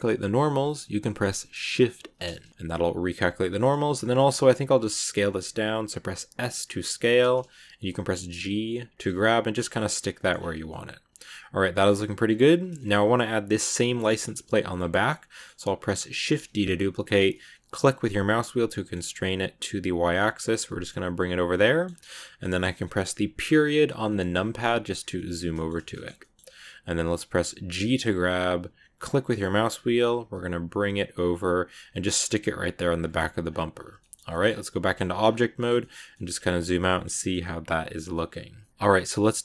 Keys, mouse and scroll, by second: 2.0 shift+n, 2.4-3.9 middle drag, 3.9 s, 9.1-10.2 middle drag, 10.2 scroll down 4, 10.5 Tab, 10.6-11.8 middle drag, 11.8 scroll up 2, 12.0 Tab, 12.1 scroll down 2, 12.7 shift+middle click, 13.5 scroll down 1, 13.7-15.1 shift+middle drag, 15.1 scroll up 1, 15.2 middle click, 16.1 shift+d, 20.5-23.9 middle drag, 23.9 KP_Decimal, 24.8 scroll down 1, 25.0-27.7 middle drag, 27.7 g, 33.1 Tab, 33.3 scroll down 4, 33.9 shift+middle click, 34.3-34.7 scroll up 1, 35.1 scroll down 2, 35.5 shift+middle click, 36.2 scroll down 2, 36.5-39.4 middle drag.